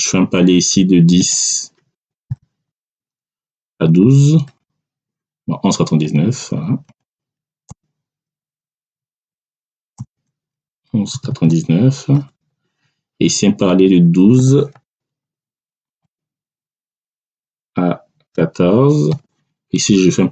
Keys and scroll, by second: 1.9 1, 2.2 0, 2.6 Tab, 3.4 1, 3.7 2, 4.4 Return, 6.8 1, 7.6 ', 8.8 BackSpace, 9.9 ', 11.0 9, 12.0 Return, 14.3 1, 14.6 2, 15.8 Tab, 17.1 1, 18.2 4, 19.0 Return.